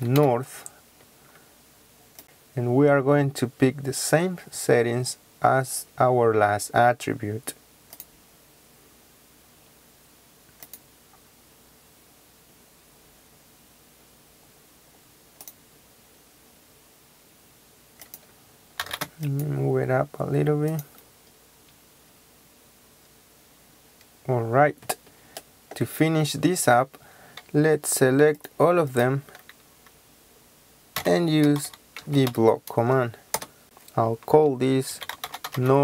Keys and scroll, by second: 0.0-0.2 typing, 18.8 typing, 30.9-32.2 typing, 33.3 Return, 34.9-35.8 typing.